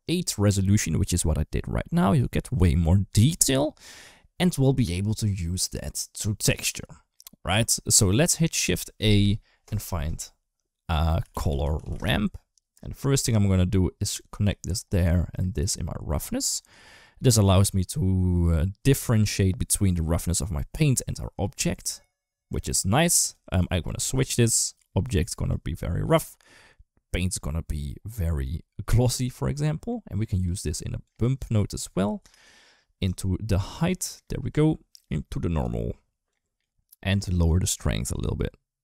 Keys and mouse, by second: 6.6 click, 7.7 middle click, 8.7 shift+a, 11.7 r, 13.8 click, 15.1-16.1 drag, 23.4 drag, 24.1 click, 24.8 click, 29.5 middle click, 30.0 click, 30.8-32.9 drag, 33.5 click, 34.7 click, 34.9-35.4 drag, 36.1 click, 37.2-38.7 drag.